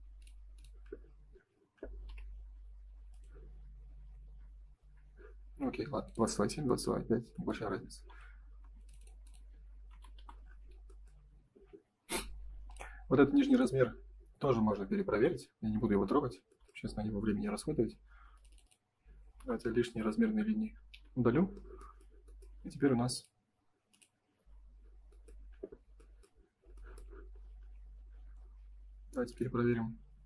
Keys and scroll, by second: 4.9 Escape, 8.6 space, 10.1 Delete, 19.3 Delete, 20.2 F3.